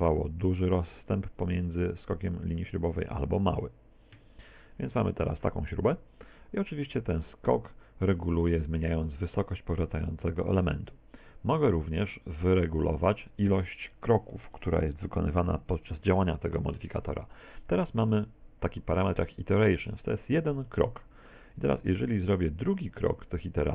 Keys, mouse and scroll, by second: 1.7 click, 2.8 s, 4.7 middle click, 9.3 click, 13.2 click, 20.7 middle click, 21.9 shift+middle click.